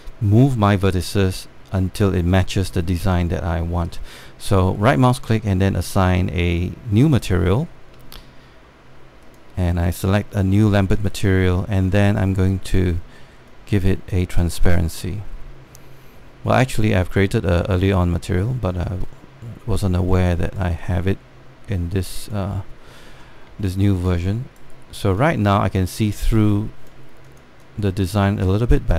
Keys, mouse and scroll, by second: 5.4-9.7 right drag, 9.9 alt+click, 14.2-16.6 alt+drag, 19.4 alt+click, 23.3 alt+scroll up 1, 23.7 alt+middle click, 24.1 scroll up 1, 24.4 alt+middle click, 24.7 right click, 25.7-28.9 drag.